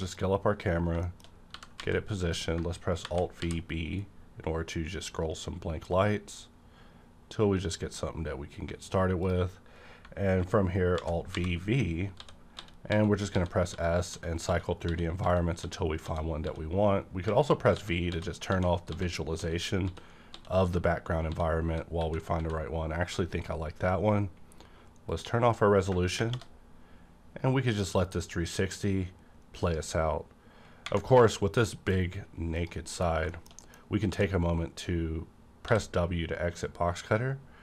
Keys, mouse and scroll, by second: 0.1 click, 0.3 scroll up 1, 0.9 scroll down 1, 1.0 shift+middle click, 1.5 g, 1.8 z, 2.3 click, 3.0 alt+v, 3.4 b, 4.0-5.3 scroll up 3, 9.2 click, 11.0 alt+v, 12.2-17.7 typing, 16.2 alt+v, 19.8 s, 23.3 click, 25.1 click, 26.2 -, 31.3 scroll up 1, 31.6 middle click, 32.2 scroll up 1, 32.5 click, 32.9 KP_Decimal, 33.3 shift+middle click, 34.1 d, 35.6 w.